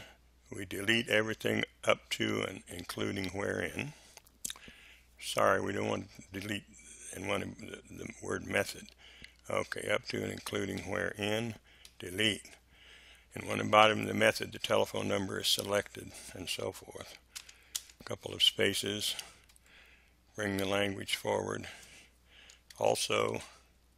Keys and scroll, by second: 11.8 Delete, 17.3 space, 19.4 Delete, 22.5-23.9 typing.